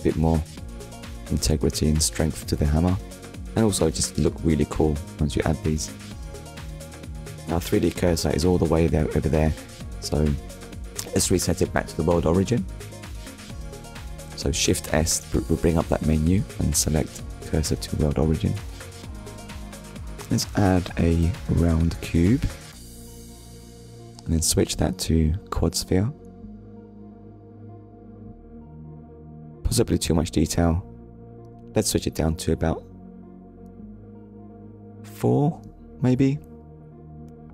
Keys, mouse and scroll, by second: 1.9 scroll up 1, 2.8 scroll down 1, 7.4 shift+s, 9.6 click, 11.4 middle click, 13.1 KP_1, 16.8 shift+a, 20.8 click, 24.0 click, 26.2 click, 27.6 shift+middle click, 29.9 click, 30.9 click, 32.6 click, 33.1 click, 36.1 middle click.